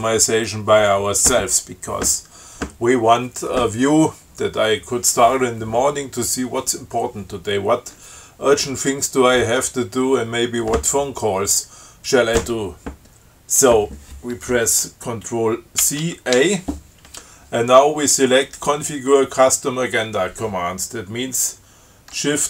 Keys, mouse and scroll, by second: 16.0 ctrl+c, 16.6 ctrl+a.